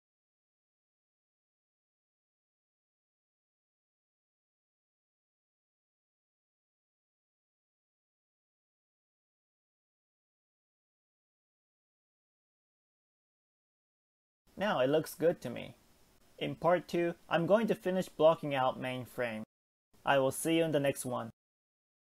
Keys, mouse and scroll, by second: 1.8-2.8 shift+middle drag, 2.8 click, 3.5 click, 4.1 g, 6.2-6.9 shift+middle drag, 6.9 click, 7.5 g, 9.7 scroll up 2, 9.8 click, 10.6 g, 12.1-12.5 shift+middle drag, 12.5-13.1 scroll up 2, 13.1 click, 14.3 g, 17.0-17.7 scroll down 2, 17.2 Tab, 17.7-18.6 middle drag, 18.6 scroll down 1, 18.9-20.4 shift+middle drag, 20.4-20.7 scroll up 3, 20.7-22.1 middle drag.